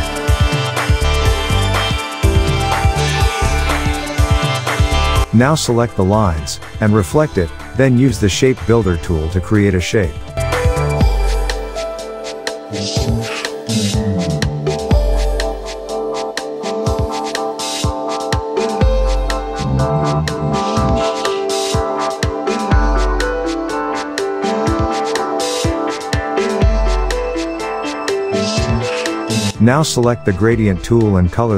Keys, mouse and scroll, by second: 4.7 shift+click, 5.7 right click, 7.3-11.6 drag, 9.6-11.3 shift+drag, 11.6 alt+scroll down 1, 11.9-12.8 click, 13.1-13.8 alt+scroll up 1, 13.8 click, 19.5 Delete, 20.2 click, 21.0 alt+scroll down 1, 21.3 click, 22.2-25.1 drag, 24.0-25.0 click, 25.3 ctrl+f, 26.5 shift+click, 26.9-27.4 click, 27.5 alt+scroll up 1, 27.7-28.5 click, 28.1 space, 28.2 click.